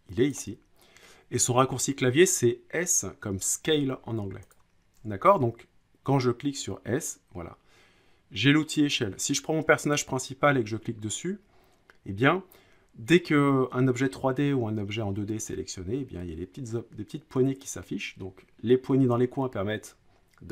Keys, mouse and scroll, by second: 0.3 ctrl+click, 1.7 Escape, 5.2 s, 9.9-11.0 drag.